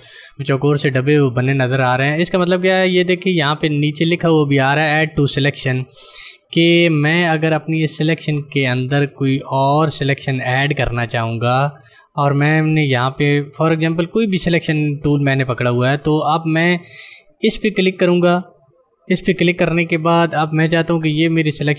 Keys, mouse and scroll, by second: 18.5 ctrl+click.